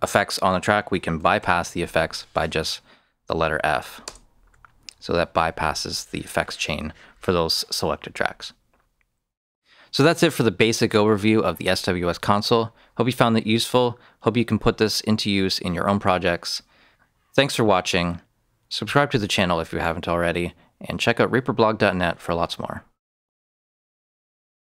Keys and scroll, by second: 1.3 f, 3.9 Return.